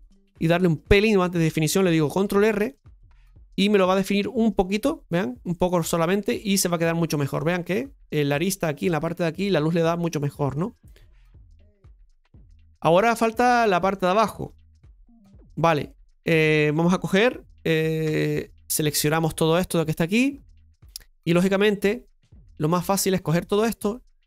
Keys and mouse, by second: 3.6 Tab, 4.1-4.5 middle drag, 6.0-7.3 middle drag, 10.5-11.4 middle drag, 12.6-13.9 middle drag, 14.3 Tab, 15.1-17.4 shift+middle drag, 18.0 KP_Divide, 19.2-21.0 middle drag, 21.2-22.8 right drag, 22.8-24.2 drag.